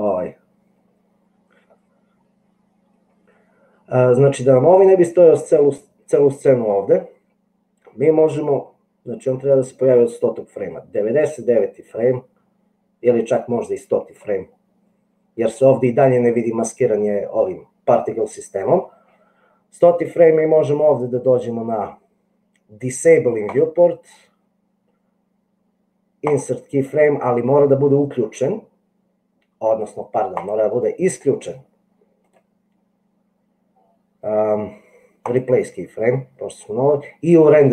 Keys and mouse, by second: 9.6-14.4 drag, 23.8-26.7 right drag, 30.7 click, 32.5-35.7 right drag.